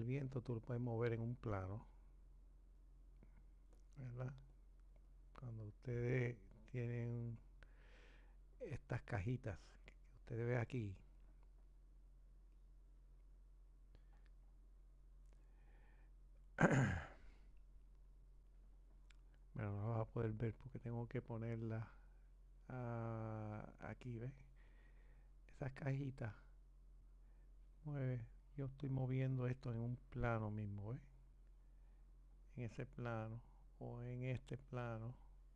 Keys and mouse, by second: 1.4-3.8 drag, 5.1 click, 11.3-26.7 drag, 34.3 click.